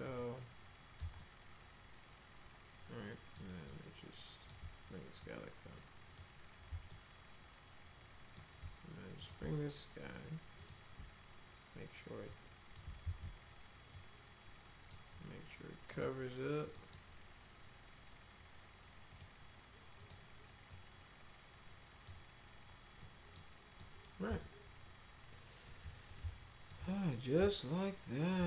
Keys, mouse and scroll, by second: 0.0-1.0 drag, 1.2-3.3 alt+middle drag, 3.7 alt+middle click, 5.2 click, 6.9-8.3 alt+middle drag, 9.2 click, 10.6 ctrl+click, 12.3 click, 13.0 ctrl+z, 13.9 click, 15.9 click, 16.7 middle click, 19.1 click, 20.0 click, 20.7-22.0 drag, 23.0 middle click, 23.8 middle click, 24.4-25.8 alt+middle drag, 26.1 alt+middle click, 26.9 middle click, 27.3 alt+middle click.